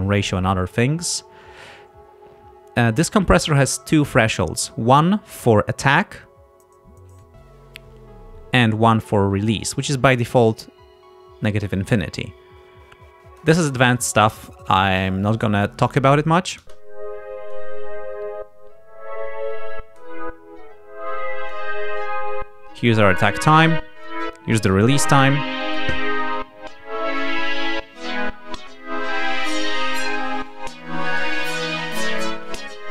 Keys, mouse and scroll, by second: 7.2-9.1 drag, 9.7-13.6 drag, 16.7 space, 17.6-20.2 drag, 21.5-23.1 drag, 24.1-26.0 drag, 29.6 click, 31.1-32.9 drag.